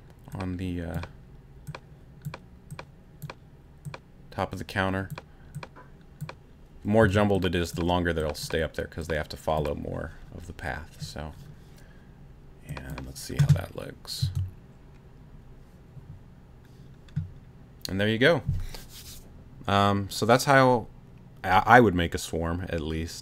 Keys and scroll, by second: 7.0 c, 14.2 space.